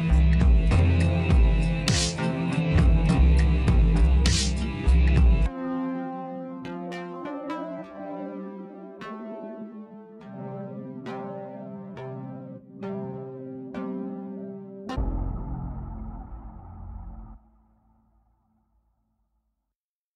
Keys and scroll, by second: 2.0 space, 10.4 ctrl+-, 10.8 space, 13.7 space, 14.6 ctrl+=, 16.2 ctrl+-, 18.0 ctrl+-, 18.1 ctrl+=.